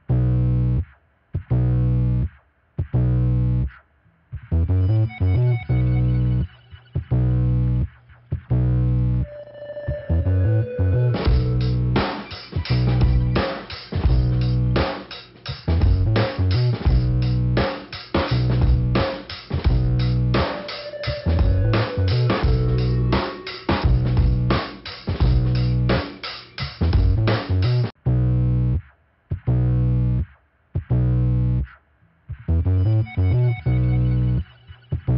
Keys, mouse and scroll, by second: 0.1 click, 0.8 scroll down 2, 1.8 click, 2.7 click, 4.9 click, 5.6 click, 7.4 click, 8.3 click, 9.5 click, 10.4 click, 10.4 click, 11.6 click, 13.0 click, 13.1 click, 14.3 click, 15.8 click, 17.3 click, 19.3 click, 21.2 click, 23.9 click, 25.4 click, 26.0 click, 27.2 click, 27.4 click, 28.3 click, 29.3 click, 30.0 click, 30.7 scroll down 2, 31.7 click, 33.2 click, 34.1 click.